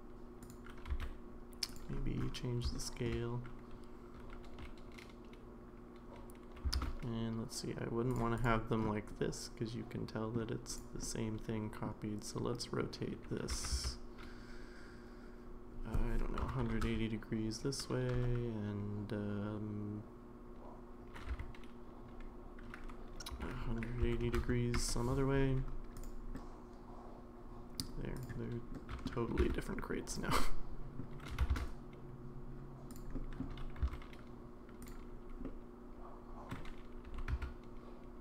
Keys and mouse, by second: 0.9 s, 2.7-3.1 middle drag, 4.5 g, 9.2-10.3 middle drag, 10.7 click, 11.0-11.9 middle drag, 12.5 middle drag, 13.5 r, 21.3 r, 26.4-27.8 middle drag, 28.7-29.1 middle drag, 29.3 g, 30.4-31.0 middle drag, 31.3 g, 33.2 middle click, 33.8 s, 35.4-36.5 middle drag, 37.1 r.